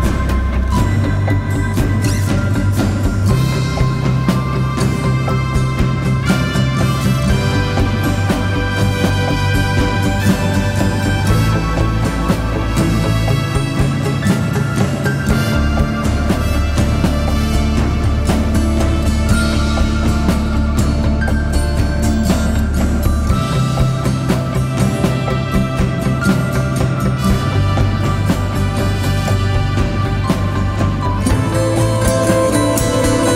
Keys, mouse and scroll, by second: 0.3 double click, 8.0 right click, 8.9 double click, 28.4-29.4 typing, 30.5-31.4 typing.